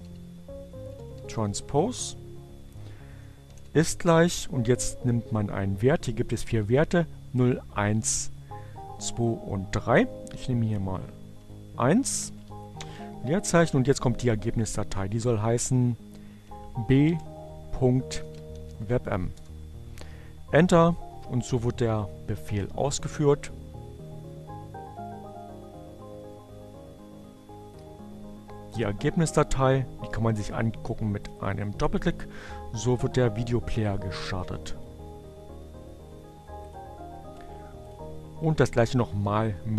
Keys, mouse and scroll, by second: 0.0-0.8 typing, 2.6 shift+0, 10.3 1, 10.6 shift+2, 12.1 shift+space, 15.0-15.9 typing, 17.5-18.6 typing, 21.4 click, 30.6 click, 33.7-35.0 drag, 38.2-39.0 drag.